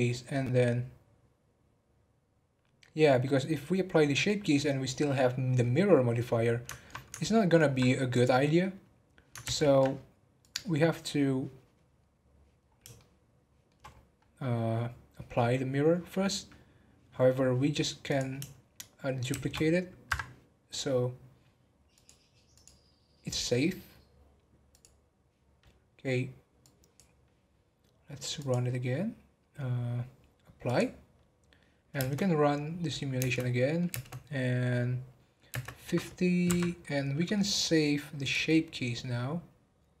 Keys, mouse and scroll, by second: 8.1 click, 9.4 ctrl+z, 10.4 click, 12.6-12.9 scroll down 3, 12.9-13.8 shift+middle drag, 13.8 scroll up 4, 18.0 click, 19.3 shift+d, 21.9 click, 24.8 click, 26.6-31.4 drag, 31.9 space, 33.1 space, 33.3-33.9 middle drag, 33.9 space, 35.5 space, 36.5 Right, 36.8-38.2 middle drag, 38.2-40.0 drag.